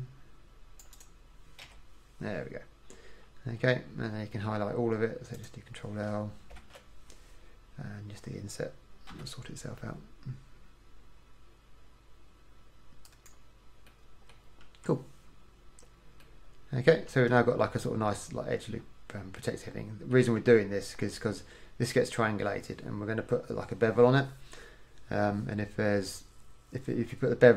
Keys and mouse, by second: 1.8 f, 6.7 ctrl+l, 9.2 i, 12.6 click, 14.0 middle click, 14.8 KP_1, 17.2 KP_1, 20.6 KP_1.